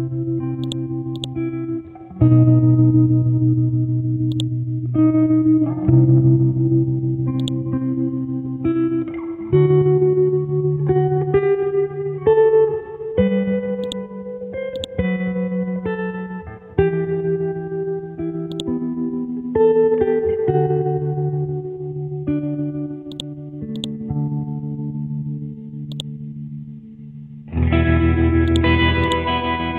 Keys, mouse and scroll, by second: 1.1 right click, 3.8 ctrl+g, 4.3 click, 5.7 KP_0, 7.3-9.7 drag, 9.7-10.8 scroll up 2, 11.5-11.9 scroll up 1, 13.2 scroll down 1, 14.8 ctrl+click, 15.6 ctrl+Delete, 15.9 scroll down 1, 16.7 scroll up 1, 18.5-20.0 drag, 20.5-22.2 scroll up 1, 23.1-25.1 drag, 25.9 click, 26.2 scroll down 1, 27.2 scroll up 1, 28.5-29.7 drag.